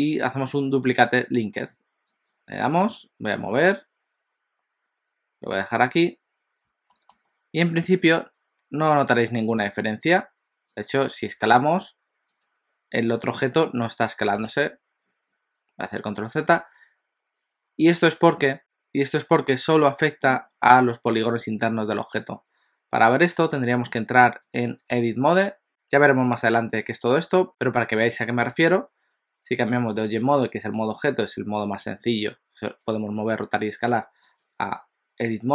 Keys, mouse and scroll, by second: 6.9 middle click, 10.7 click, 11.3 s, 14.5 ctrl+z, 16.6 alt+a, 24.5 click, 34.4 click.